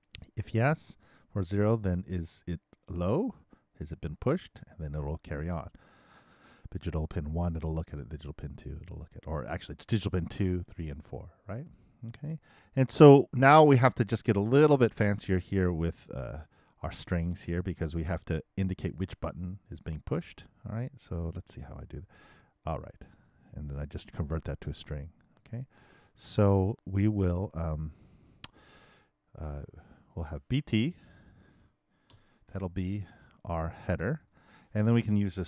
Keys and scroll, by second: 32.1 shift+BackSpace, 34.9 shift+space.